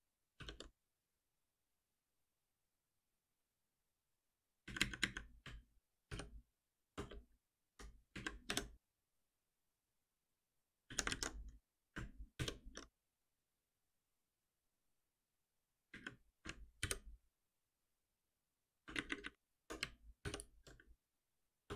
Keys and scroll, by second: 0.4 shift+F10, 6.1 alt+F7, 7.6 Down, 8.1 Up, 10.5 ctrl+y, 12.3 shift+F10, 16.9 ctrl+alt+l, 20.2 alt+F7.